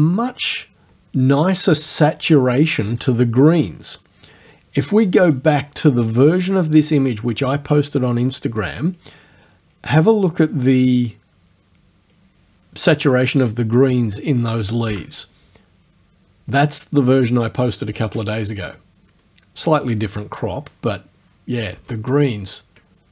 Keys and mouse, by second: 14.9 BackSpace, 21.8 space.